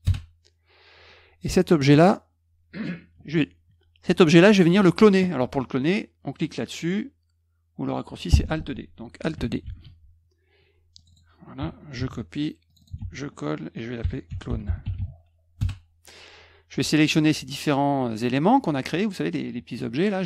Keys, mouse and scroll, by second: 0.0 Return, 1.8 click, 9.6 alt+d, 10.9 click, 11.1 click, 11.9 ctrl+c, 12.6 click, 12.8 click, 12.9 ctrl+v, 13.7-15.4 typing, 15.5 Return, 17.0 click, 17.6 shift+click, 18.0 shift+click.